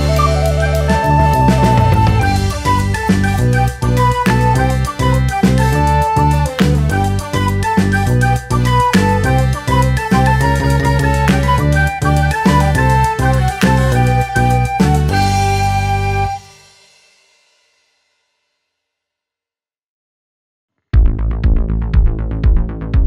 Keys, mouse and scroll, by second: 0.0-6.6 typing, 0.0 shift+middle click, 0.4 shift+middle click, 1.5 shift+middle click, 1.9 shift+middle click, 3.6 scroll down 2, 3.7 shift+middle click, 3.8 scroll up 1, 4.4 shift+middle click, 4.4-4.8 scroll up 1, 6.5 shift+middle click, 6.5 scroll up 2, 8.7 g, 8.9 shift+middle click, 9.0 scroll down 3, 9.5 g, 10.2 scroll down 1, 10.2 shift+middle click, 10.3 scroll up 3, 10.5 g, 10.8 shift+middle click, 10.8 a, 11.1 scroll down 1, 11.1 shift+middle click, 11.3 scroll up 1, 11.3 click, 12.4 a, 14.6 click, 14.9 Tab, 15.4 click, 16.0 click, 16.1 middle click, 16.4 KP_3, 16.9-17.3 scroll up 2, 17.3 click, 17.9 click, 18.0 f, 18.1-18.7 scroll up 5, 18.1 shift+middle click, 18.4 shift+middle click, 18.7 shift+middle click, 18.9-20.7 drag, 20.7 scroll down 2, 20.7 shift+middle click, 20.8 scroll up 1, 20.9-22.3 drag, 22.3 shift+middle click, 22.4 scroll up 1, 22.7 middle click, 23.0 KP_3.